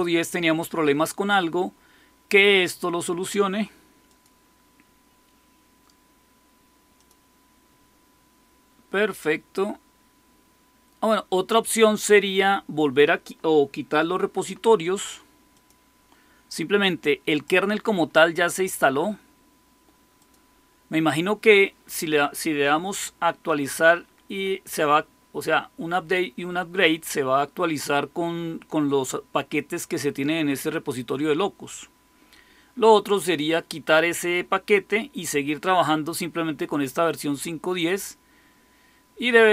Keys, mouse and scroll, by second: 3.9 click, 6.8 click, 15.4 click, 17.2 click, 20.1 click.